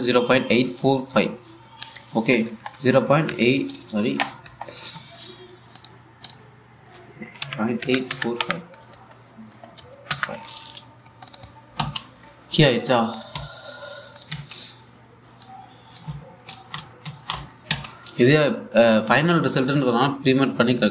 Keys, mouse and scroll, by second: 2.5 click, 4.8 =, 6.4 click, 11.9 click, 12.4 a, 13.8 click, 14.0 1, 14.8 click, 14.9 a, 16.1 click, 16.5-19.1 typing, 20.1 click.